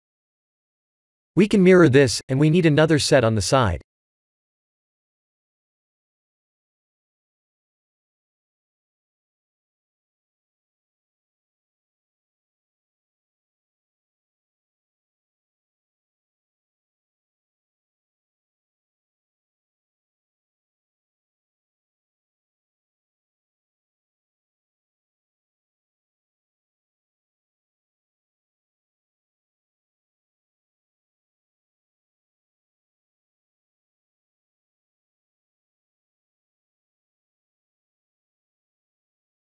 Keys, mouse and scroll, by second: 1.2 click, 1.5 click, 1.9 shift+click, 4.5 click, 6.8 click, 7.9 middle click, 12.8 KP_1, 14.8 click, 15.6 KP_7, 16.7 shift+d, 19.9 ctrl+z, 22.5 click, 24.5 shift+a, 27.3 s, 29.3 KP_1, 30.9-32.4 scroll up 4, 32.7 g, 38.0 Tab.